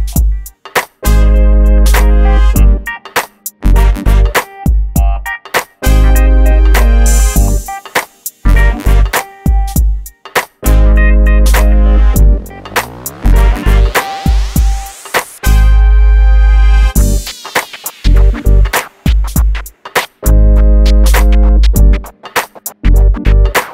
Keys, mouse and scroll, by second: 1.0-1.5 scroll up 1, 1.5 middle click, 2.8 scroll up 1, 3.7 middle click, 4.4-4.7 scroll up 1, 4.7 middle click, 5.9-7.4 scroll up 1, 8.3-18.6 drag, 18.4 g, 18.6 middle click, 19.1 click, 20.2 typing, 21.8 KP_3, 22.9 click.